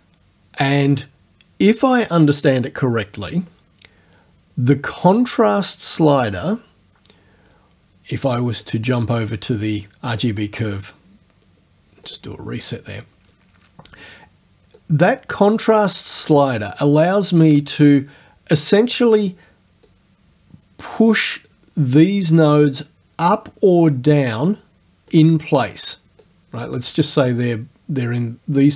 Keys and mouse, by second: 8.7 click, 10.2 click, 12.1 click, 14.8 click, 16.7 click, 19.9-25.3 drag, 26.3-28.7 drag.